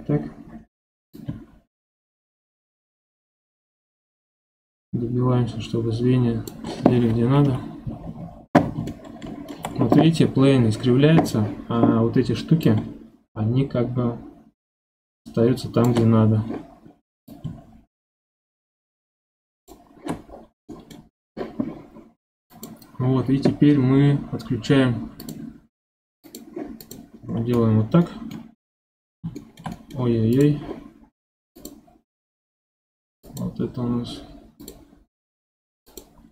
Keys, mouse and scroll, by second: 0.0-0.3 scroll up 4, 1.1-4.1 drag, 7.4 KP_1, 8.2-8.9 scroll up 4, 8.9-11.9 shift+middle drag, 12.6-15.6 drag, 17.3-20.3 drag, 20.3 scroll down 2, 20.7 middle click, 21.1 scroll down 1, 22.5 click, 25.2 click, 26.2 click, 26.8 click, 27.3 scroll down 2, 27.5-30.3 middle drag, 30.3 click, 31.5 click, 33.2 click, 34.6 click, 35.8 click.